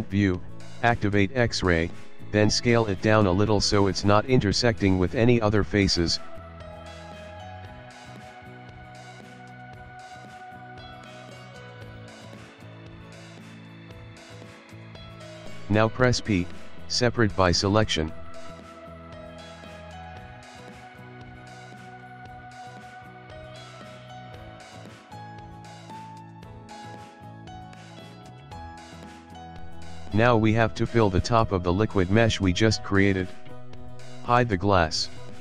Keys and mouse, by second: 0.4 click, 1.0 ctrl+middle click, 3.0 s, 5.9 shift+middle click, 6.6 ctrl+middle click, 7.0 ctrl+middle click, 7.3 shift+middle click, 8.1 shift+middle click, 8.7 shift+middle click, 9.7 shift+middle click, 9.9 s, 10.8 shift+middle click, 11.0 shift+middle click, 13.1 s, 13.4 shift+middle click, 13.8 ctrl+middle click, 14.0 ctrl+middle click, 14.1 shift+middle click, 16.4 p, 19.9 click, 20.1 click, 20.3 click, 20.4 click, 24.0 middle click, 24.6 click, 24.8 ctrl+middle click, 25.0 ctrl+middle click, 25.4 middle click, 26.1 click, 26.3 Tab, 26.5 click, 26.9 click, 27.5 click, 27.9 ctrl+middle click, 28.4 middle click, 29.0 middle click, 30.0 middle click, 30.3 shift+middle click, 30.5 middle click, 30.6 click, 31.4 click, 32.8 click, 32.9 click, 33.7 s, 35.2 click.